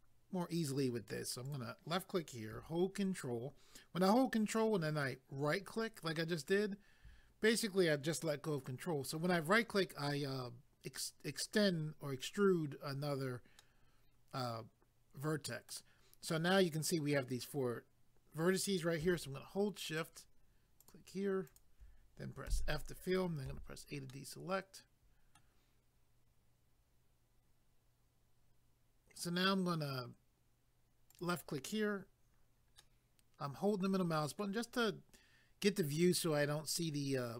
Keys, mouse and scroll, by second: 1.4 click, 5.4 ctrl+right click, 13.6 middle click, 19.9 shift+click, 20.8 shift+click, 22.5 f, 24.1 middle click, 31.1 click, 32.8 middle click.